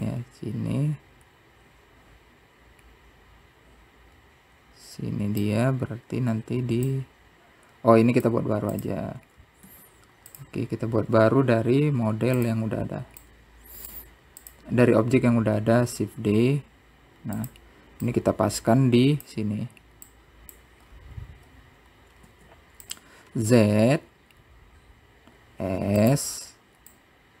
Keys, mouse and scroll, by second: 4.7-6.0 drag, 6.5 click, 7.4 x, 10.1 click, 11.0 click, 12.2 click, 13.3 shift+d, 15.8-17.0 drag, 17.8 click, 18.6-19.4 scroll up 7, 19.7 scroll down 1, 20.0 z, 21.3 s, 24.6 click, 26.6 s.